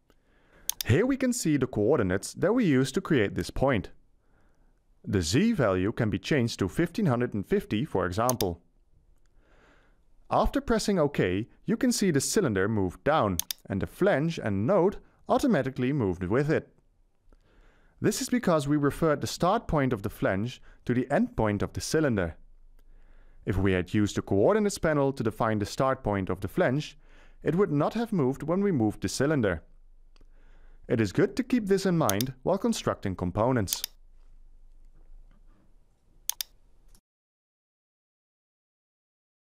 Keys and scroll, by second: 9.7-11.3 typing, 36.8 Return, 37.9 1, 38.3 7, 38.9 5, 39.3 0.